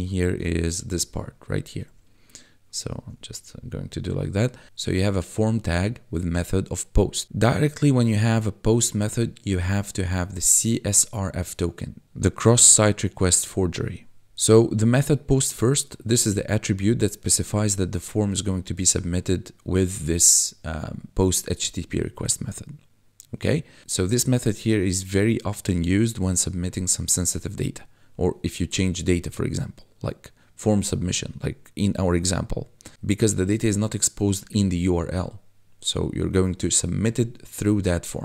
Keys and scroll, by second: 1.0 1, 3.1 1.